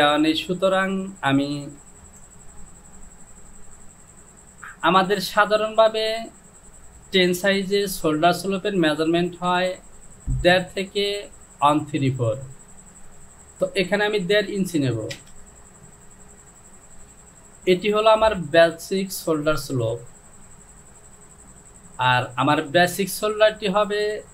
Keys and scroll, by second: 1.9 ctrl+z, 9.4 Down, 15.4 Return.